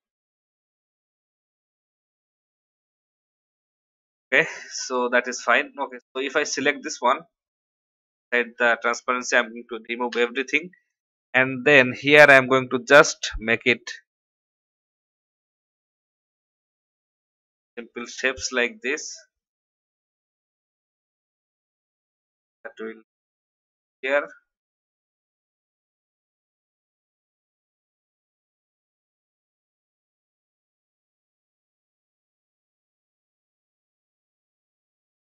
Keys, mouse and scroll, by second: 0.1 shift+Left, 0.8 shift+Right, 1.0 shift+Right, 4.1 click, 8.3 ctrl+a, 10.1 Delete, 12.0-19.5 drag, 20.0 v, 24.1 shift+click, 24.9 click, 27.2 alt+click, 29.1 shift+click, 30.6-34.5 drag.